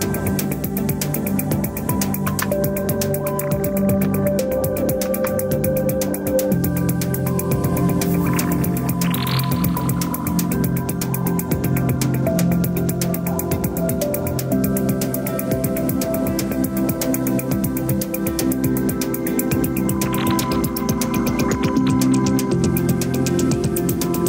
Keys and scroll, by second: 2.0 ctrl+c.